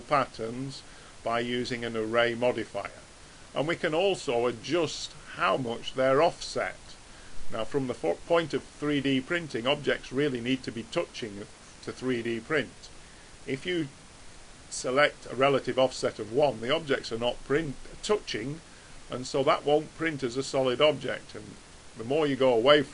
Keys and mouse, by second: 3.6-6.5 drag, 6.5-9.4 middle drag, 13.4-17.2 drag, 17.2-18.8 middle drag, 21.0-22.9 drag.